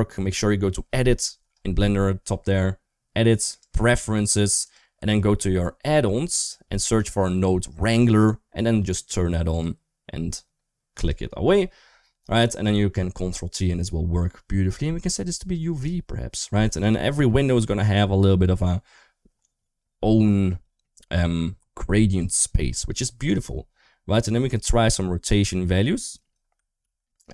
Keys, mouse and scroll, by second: 3.4-4.6 drag, 15.4 click, 24.5-26.1 drag, 26.6 ctrl+z, 27.1-27.3 drag.